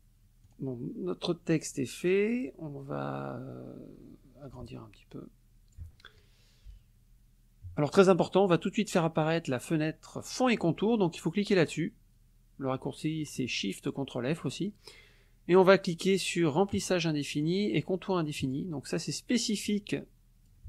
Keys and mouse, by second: 0.5 click, 1.7 click, 4.6-5.9 ctrl+drag, 10.2 click, 16.7 click, 17.3 click, 18.4 click, 19.7 click.